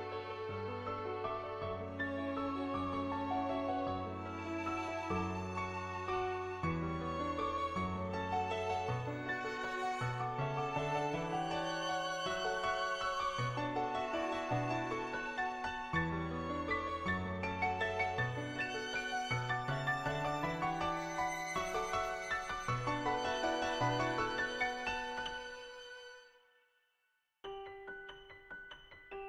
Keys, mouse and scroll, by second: 1.4 click, 2.3 ctrl+z, 2.5 ctrl+z, 4.9 click, 5.4 click, 6.7 click, 7.2 click, 8.1 click, 9.4 click, 9.7 click, 10.9 click, 11.4 click, 11.7 click, 12.0 click, 13.0 click, 15.6 click, 18.0 click, 18.4 right click, 18.9 right click, 19.3 right click, 19.5 right click, 20.4 right click, 21.6 right click, 22.1 right click, 22.3 click, 23.0 click, 24.0 click, 24.7 ctrl+z, 24.8 ctrl+z, 25.1 [, 25.4 click, 25.9 click, 26.5 click, 26.9 click, 27.7 click.